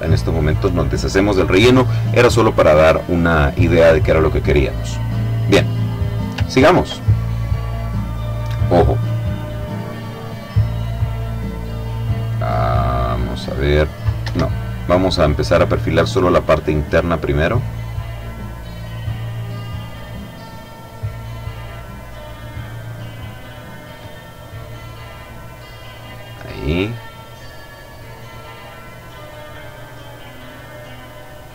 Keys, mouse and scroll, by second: 4.7 click, 5.5 middle click, 5.9 ctrl+click, 6.3-6.6 ctrl+scroll up 1, 8.3 click, 9.0 click, 10.4-11.8 drag, 13.9 Escape, 15.8 click, 18.4 click, 19.4 click, 21.2 click, 22.8 click, 25.8 click, 26.8 click, 28.2 click, 29.8 click.